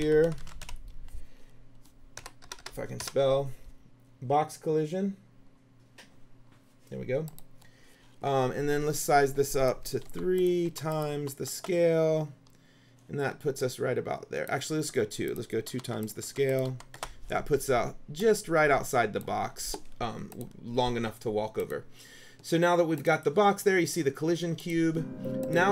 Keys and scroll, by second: 0.0-1.3 typing, 2.3 BackSpace, 10.2 KP_3, 11.7 Return, 15.8 KP_2, 17.1 Return.